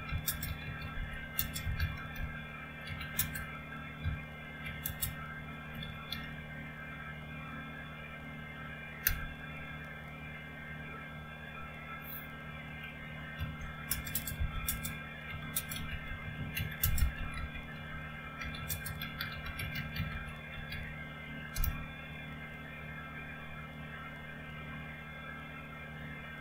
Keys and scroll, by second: 0.0-4.8 typing, 5.8 typing, 9.1 Return, 13.4-21.2 typing, 21.5 Return.